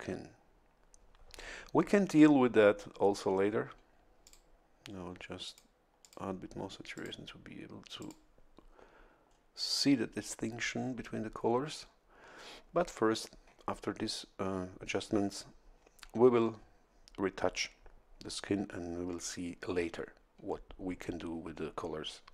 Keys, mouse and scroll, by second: 4.2 click, 5.4 click, 6.0 click, 6.9 click, 8.0 click, 9.2 scroll down 1.